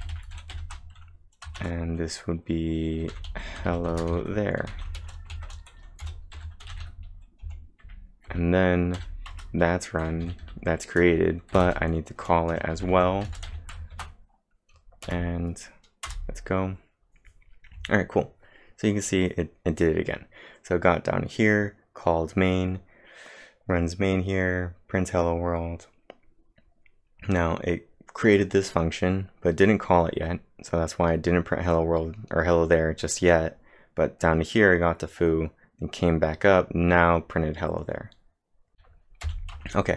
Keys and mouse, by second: 0.0-1.6 typing, 3.9-5.4 typing, 7.6-9.0 typing, 9.3 Return, 10.0 f, 11.3-14.0 typing, 15.1 Up, 16.1 Return, 38.7 typing, 39.6 Return.